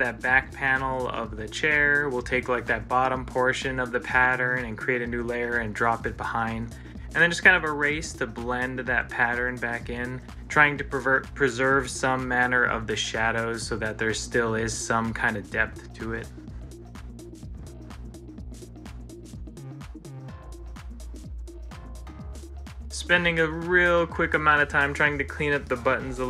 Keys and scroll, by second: 2.1 ctrl+z, 10.2 ctrl+z, 15.1 ctrl+s, 20.5 ctrl+s.